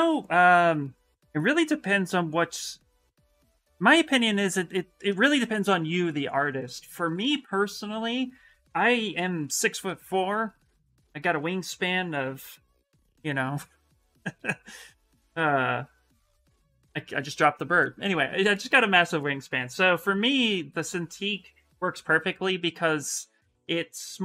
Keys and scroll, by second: 0.4 s.